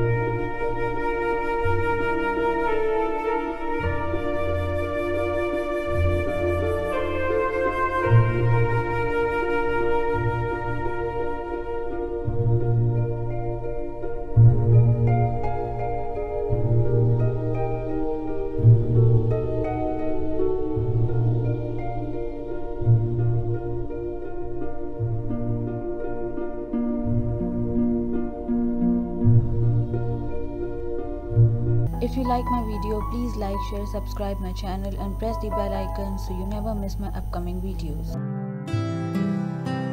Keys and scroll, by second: 27.3 ctrl+-, 30.0 =, 30.4 space.